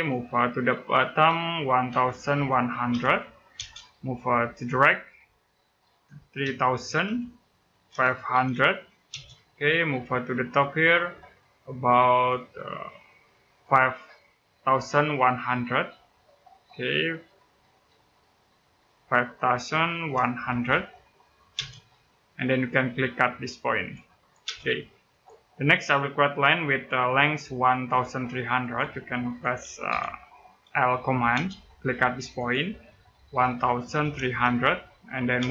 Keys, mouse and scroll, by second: 1.7-3.3 typing, 6.2-8.9 typing, 12.0 click, 17.7 middle click, 18.7-21.3 typing, 23.5 click, 24.2 space, 24.9 click, 28.4 click, 29.7 l, 31.1 space, 32.2 click, 33.2-35.2 typing.